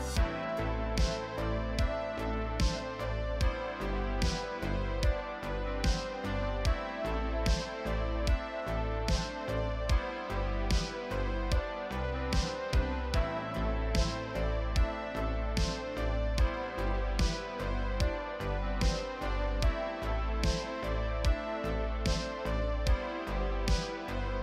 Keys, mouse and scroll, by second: 0.5 shift+middle click, 0.5 scroll up 2, 0.7 scroll down 1, 0.8 scroll up 1, 0.8 Tab, 0.9-3.7 typing, 0.9 shift+middle click, 1.0 ctrl+r, 1.5 middle click, 1.8 middle click, 2.1 scroll down 4, 2.1 middle click, 2.2-2.5 scroll up 2, 3.0 middle click, 3.1 middle click, 3.2 shift+click, 3.2 middle click, 3.3 scroll up 1, 3.4 middle click, 3.7 middle click, 4.5 scroll down 4, 4.5 middle click, 4.6 Tab, 4.6 shift+middle click, 4.7-5.0 scroll up 2, 4.8-7.8 typing, 4.9 shift+middle click, 5.6 middle click, 5.8 middle click, 6.1 middle click, 6.1 scroll up 1, 6.3 middle click, 6.8 Tab, 7.1 Tab, 7.4 scroll up 2, 7.7 scroll down 2, 8.6 ctrl+r, 8.9 middle click, 9.0-17.2 typing, 9.3 middle click, 9.3 Tab, 9.4-10.0 scroll down 10, 9.4 middle click, 9.8 middle click, 10.0-10.5 scroll up 4, 10.0 middle click, 10.2 click, 10.4 Tab, 10.5 shift+middle click, 10.6 scroll down 1, 10.8 alt+click, 10.8 middle click, 11.1 middle click, 11.8 middle click, 12.1 middle click, 12.1 scroll up 2, 12.2 shift+middle click, 13.5-13.8 scroll down 3, 13.8 click, 13.9 middle click, 14.0 alt+click, 14.1 middle click, 15.1 middle click, 15.1 alt+click, 15.2 middle click, 15.6-16.2 scroll up 4, 15.8 middle click, 16.2 scroll down 1, 16.3 shift+middle click, 16.8 middle click, 16.9-17.4 scroll up 3, 16.9 middle click, 17.2 Tab, 17.3 alt+click, 17.4 middle click, 18.1 middle click, 18.2 scroll down 1, 18.2 alt+a, 18.4-23.4 typing, 18.5 middle click, 18.6-18.9 scroll up 3, 18.8 click, 19.0 scroll down 1, 19.1 middle click, 19.2 Tab, 19.2 middle click, 20.0 middle click, 20.1-20.5 scroll up 2, 20.1 middle click, 20.4 middle click, 20.7 middle click, 20.9 middle click, 21.2 scroll down 6, 21.2 middle click, 21.3 shift+middle click, 21.4 middle click, 21.5 scroll up 5, 21.8 scroll down 1, 21.9 shift+middle click, 22.2 middle click, 22.2 Tab, 23.0 scroll up 1, 23.3 shift+middle click, 23.7 scroll down 3, 23.7 middle click, 23.8 scroll up 1, 23.8 ctrl+KP_Add, 23.9 ctrl+KP_Add, 24.0 right click.